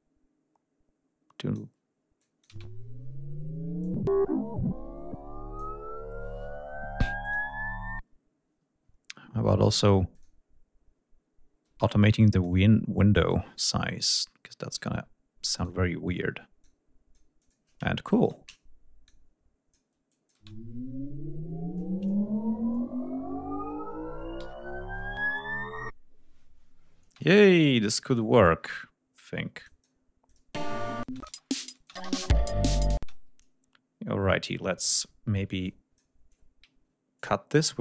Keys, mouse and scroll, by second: 1.8-2.2 drag, 2.1 space, 3.4-5.4 drag, 6.9 click, 9.8 click, 10.7 scroll down 2, 11.3 space, 11.8 click, 12.6-14.6 drag, 15.0 d, 15.2 click, 16.2 click, 17.0 click, 17.9 shift+right click, 18.7 click, 19.7 click, 20.0 space, 23.2 ctrl+scroll down 2, 24.0 ctrl+g, 26.7 space, 27.2-27.5 scroll up 2, 27.7 scroll down 2, 29.3-29.7 drag, 29.9 click, 30.2 space, 30.8 click, 31.5 click, 32.6 space, 34.5 r, 35.3 click, 36.8 ctrl+click, 37.2 ctrl+click, 37.7 ctrl+click.